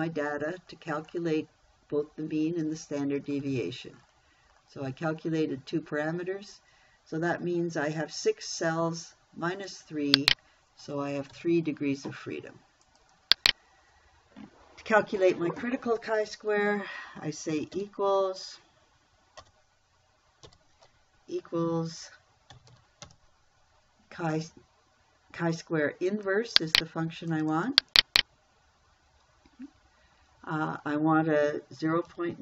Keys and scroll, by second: 11.8 3, 18.2 shift+=, 19.8 BackSpace, 20.9 =, 23.0 c, 23.2 h, 23.5 i.